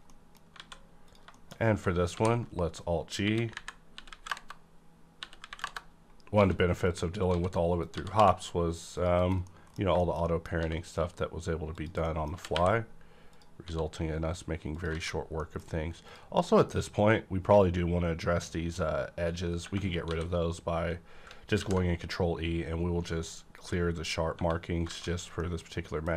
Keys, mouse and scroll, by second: 0.1 middle click, 0.5 scroll down 1, 0.6 alt+a, 1.0 click, 1.3 middle click, 1.5 scroll down 1, 2.0 alt+g, 2.7-3.0 scroll up 1, 3.1-8.1 typing, 4.3 KP_Enter, 5.6 KP_Enter, 6.9 click, 7.8 click, 8.9 click, 9.2 KP_Decimal, 9.5 middle click, 10.0 shift+middle click, 10.6 s, 11.7 click, 12.0 middle click, 12.4 middle click, 12.4 g, 13.2 click, 13.5 s, 14.7 click, 14.9 alt+a, 15.1 scroll down 1, 15.3 middle click, 15.6-16.0 scroll up 1, 16.0 click, 17.1 scroll up 1, 19.0 scroll up 1, 19.5 scroll down 1, 19.6 Tab, 20.0 a, 21.5 ctrl+e, 23.6 click, 24.9 alt+a, 25.1 scroll down 1, 25.3 middle click, 25.4 middle click.